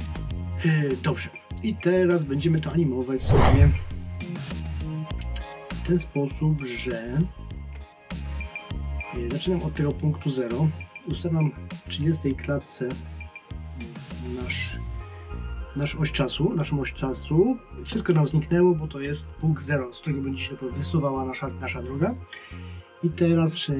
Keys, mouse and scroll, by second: 11.8 click.